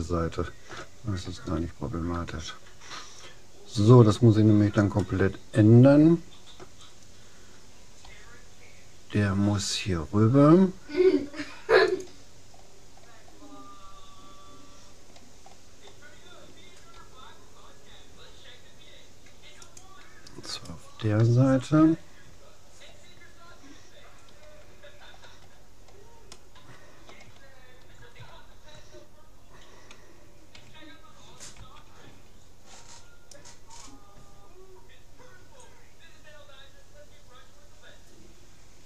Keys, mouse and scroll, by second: 4.0-6.8 middle drag, 8.2 g, 12.6 click, 16.6 click, 17.0 g, 20.6-21.8 right drag, 25.0 middle click, 26.4-30.2 middle drag, 31.6 c.